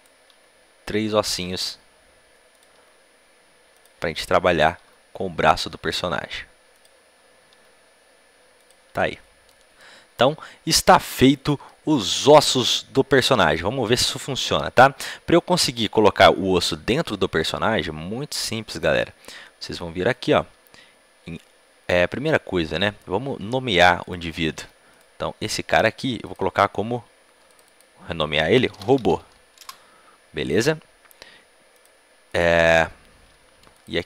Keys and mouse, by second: 1.4 e, 2.4-4.8 drag, 2.7 e, 4.8 e, 5.6 e, 7.5 e, 8.6 click, 9.2 click, 10.4 click, 10.6 middle click, 11.9-16.9 middle drag, 18.8-21.7 drag, 22.3-24.5 middle drag, 24.5 Tab, 24.5-27.8 right drag, 27.8-34.0 drag.